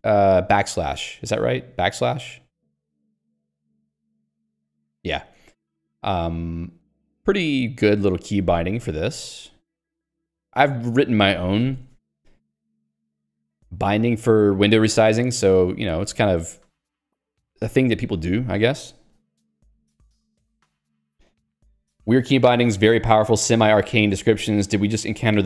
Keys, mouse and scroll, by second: 11.6 ctrl+g, 12.0 Escape.